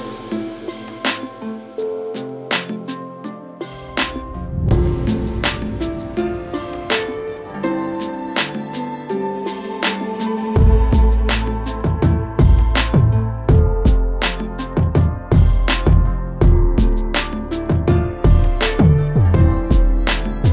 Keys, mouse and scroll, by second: 0.2-1.0 alt+scroll, 1.9 click, 3.7 scroll, 4.7 alt+scroll, 5.0 alt+middle click, 6.3 click, 7.2 alt+middle click, 11.9 click, 13.1 click, 14.8-16.1 scroll, 15.3 middle click, 17.0 scroll, 17.7 a, 18.3 click, 19.1 shift+click, 20.2 j.